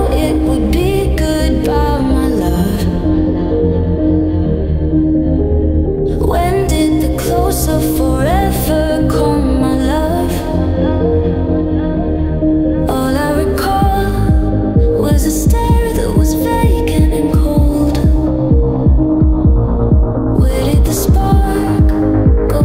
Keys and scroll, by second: 5.7 ctrl+z, 7.6 alt+Left, 12.6 alt+Left, 16.0 alt+Right, 18.7 alt+Left.